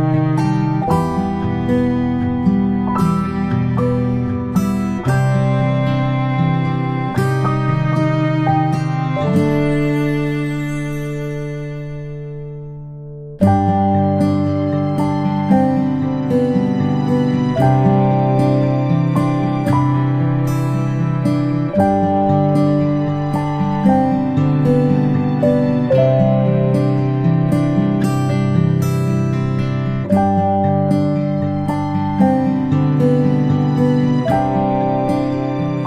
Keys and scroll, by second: 27.6 ctrl+[, 27.9 ctrl+[, 28.3 ctrl+], 32.7 p.